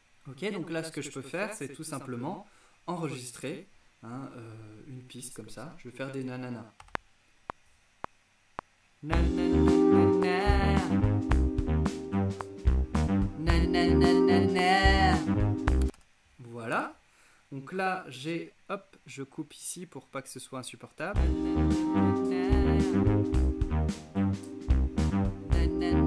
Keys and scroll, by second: 6.9 r, 15.9 space, 21.1 space.